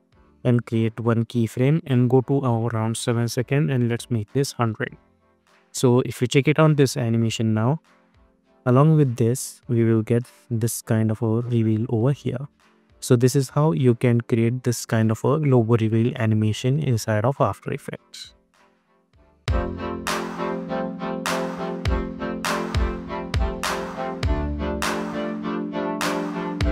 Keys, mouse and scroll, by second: 0.5 click, 4.1 Return, 5.2 click, 6.1 space, 18.7 space.